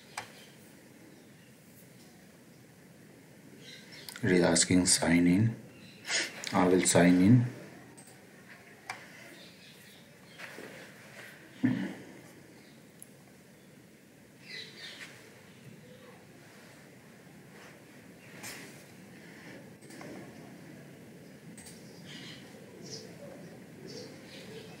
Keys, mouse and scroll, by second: 4.9 click, 7.9 click, 21.5 click.